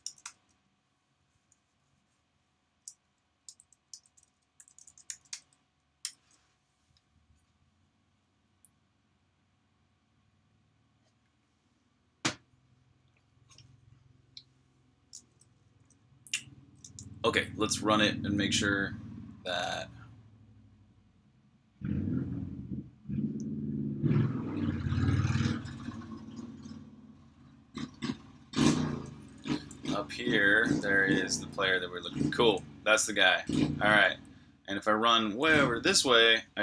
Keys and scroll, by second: 0.0-0.5 typing, 2.1-7.4 typing, 19.2-20.9 typing, 29.0-31.5 typing, 35.2-35.9 typing.